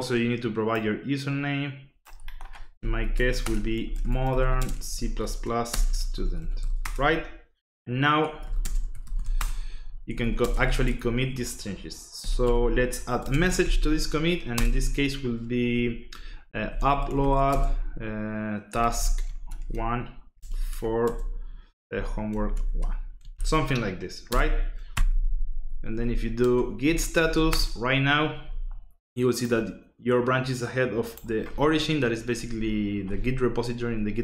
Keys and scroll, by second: 2.8 Left, 3.0 Escape, 3.1-14.5 typing, 16.4-24.3 typing, 24.9 Return, 25.7-27.6 typing.